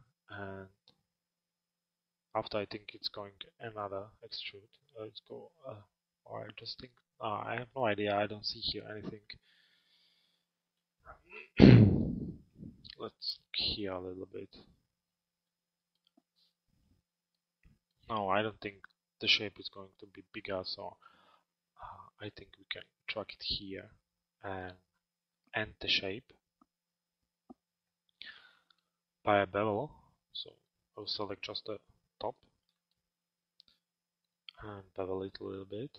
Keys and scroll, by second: 12.5 alt+x, 14.7 f.